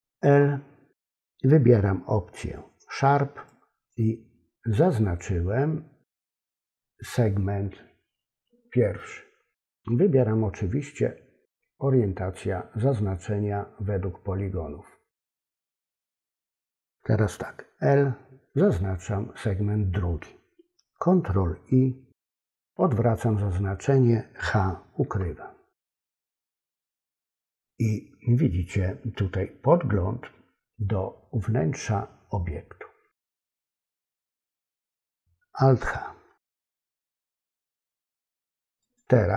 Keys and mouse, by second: 3.4 click, 6.2 click, 16.0 click, 22.0 ctrl+i, 25.0 h, 36.7 alt+h, 38.9 click.